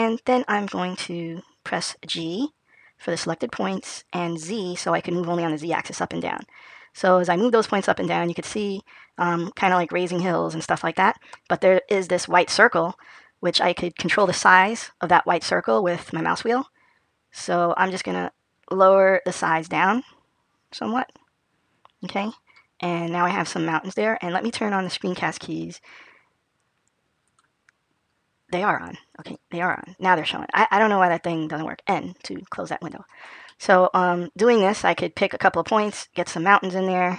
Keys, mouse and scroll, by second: 29.4 click, 33.1 n, 33.4 middle click.